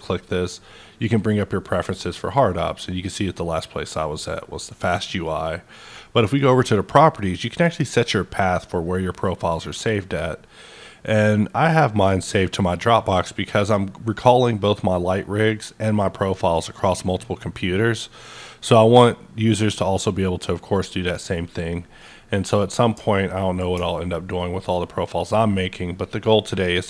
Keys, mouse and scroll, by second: 1.7 click, 4.1-8.7 drag, 21.1 click, 22.0-26.8 middle drag, 24.4-26.8 ctrl+drag.